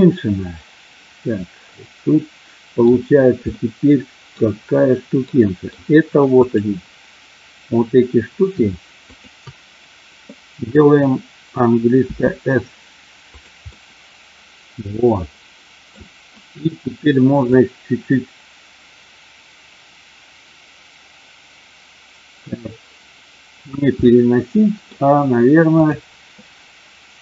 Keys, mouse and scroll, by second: 3.5 middle click, 4.5-5.7 middle drag, 6.3 click, 9.0 shift+click, 12.1 s, 13.3 click, 13.7-15.9 middle drag, 17.4-23.6 drag, 24.1 middle click.